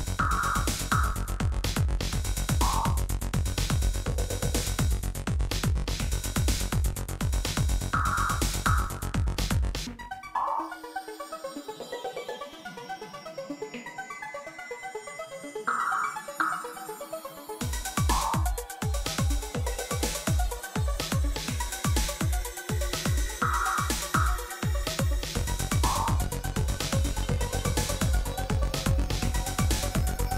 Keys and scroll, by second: 4.7 Tab, 10.2 1, 10.7 shift+z, 12.7 s, 16.6 shift+z, 17.4 Tab, 18.0 alt+a.